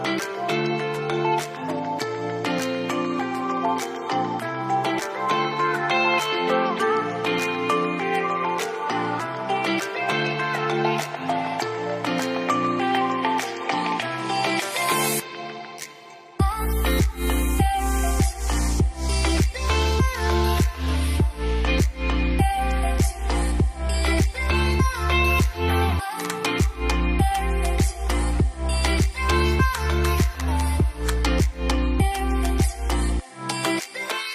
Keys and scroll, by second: 0.2-1.9 typing, 0.3 Tab, 2.9 Return, 3.9 0, 4.0 Return, 29.4 typing, 29.5 Return, 32.9-33.9 typing.